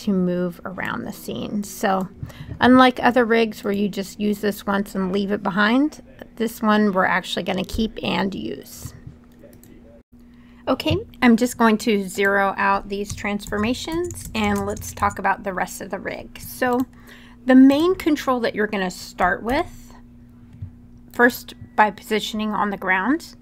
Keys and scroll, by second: 10.0 super+z, 12.8-14.5 typing, 13.2 Tab, 13.6 Tab, 14.0 Tab, 14.3 Tab, 14.7 Tab, 19.2 w.